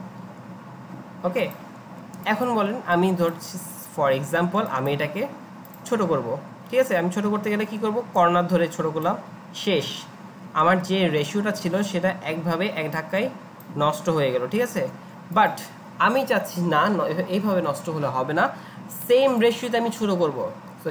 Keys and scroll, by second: 10.9 ctrl+z, 14.7 ctrl+z.